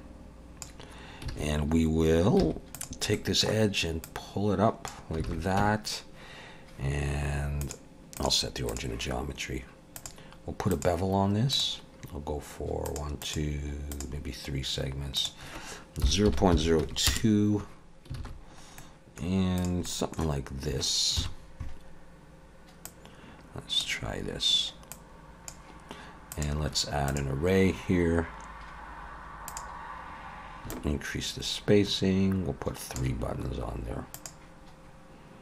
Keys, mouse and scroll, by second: 1.3 alt+a, 2.4 2, 2.7 click, 3.1 middle click, 4.1 click, 5.3 alt+a, 5.6 Tab, 7.6 click, 10.0 click, 10.7 click, 12.8 click, 13.2 click, 13.9 click, 15.1 click, 18.2 alt+a, 18.3-19.6 scroll down 2, 18.8 middle click, 19.6 click, 19.8 middle click, 21.2 KP_7, 22.9 click, 24.9 click, 26.3 click, 30.6 click, 30.8 shift+click, 34.1 click.